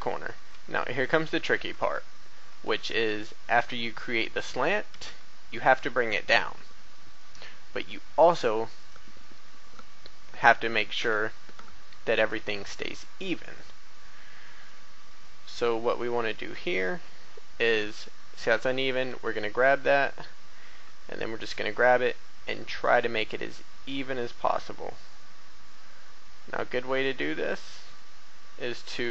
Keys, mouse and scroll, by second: 0.0 shift+a, 0.3 shift+b, 0.4 click, 1.8 shift+middle click, 2.7-3.1 scroll down 1, 3.2 shift+middle click, 4.8 e, 8.7 click, 10.9 a, 12.7 right click, 13.3-13.8 scroll up 1, 15.2 shift+middle click, 20.6 g, 27.5 click, 28.3 scroll up 1.